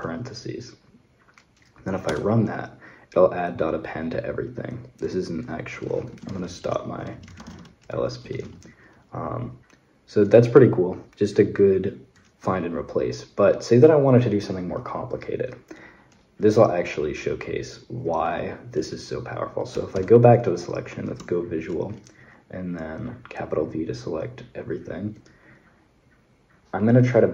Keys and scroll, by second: 1.9 Return, 5.5-8.7 typing, 19.3-20.3 typing, 21.3 shift+v.